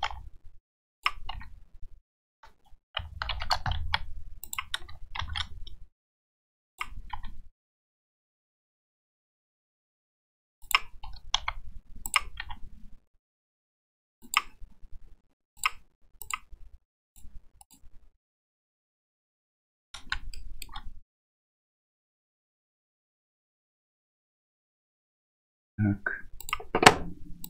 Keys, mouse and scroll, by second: 0.1 r, 1.4 h, 3.3 h, 3.8 g, 5.2 shift+d, 7.2 r, 11.4 g, 12.5 r, 15.6 click, 16.2 click, 20.4-20.7 shift+middle drag, 26.5 click.